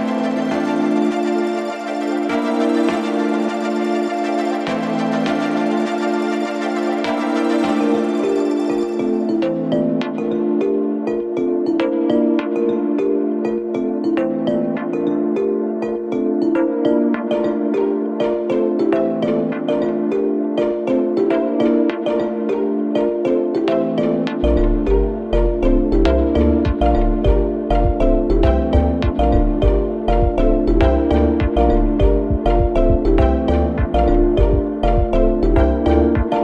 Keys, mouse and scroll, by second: 6.2-10.1 drag, 14.8-16.3 alt+drag, 16.3 alt+scroll up 1, 17.0-19.6 drag, 19.6-21.4 alt+drag, 21.4 alt+scroll down 1, 23.0-27.1 drag, 28.4-30.8 drag, 30.8 alt+scroll up 1, 31.8 click, 32.8 scroll down 2, 33.9 alt+scroll up 1, 35.3-36.4 drag.